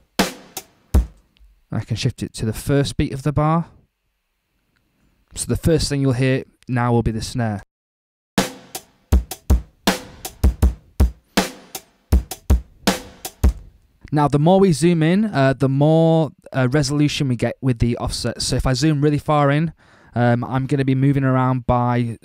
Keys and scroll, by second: 1.0 space, 7.5 space, 13.5 space.